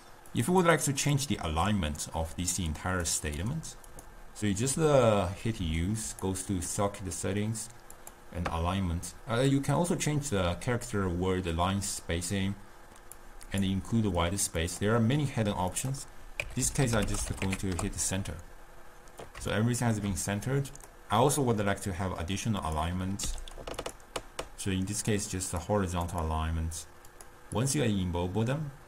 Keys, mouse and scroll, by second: 0.0 click, 0.4 click, 0.8 drag, 1.2 click, 2.6 click, 3.4 click, 4.0 click, 5.4 u, 15.8-18.9 drag, 19.6-20.8 shift+middle drag, 20.8 click, 22.8 click, 23.3 u, 27.7 click.